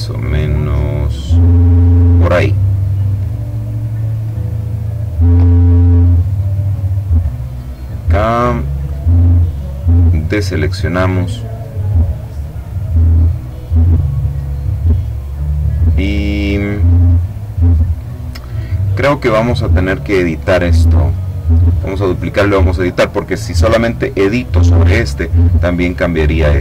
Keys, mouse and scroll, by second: 6.9 click, 8.6 click, 9.2 click, 19.8 click, 21.3-22.4 drag.